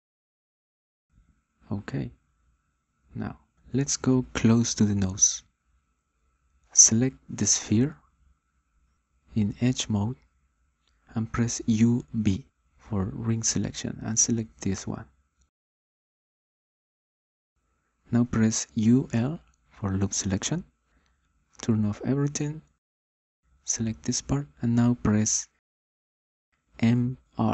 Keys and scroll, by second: 13.7 u, 14.4 b, 19.7 u, 20.8 l.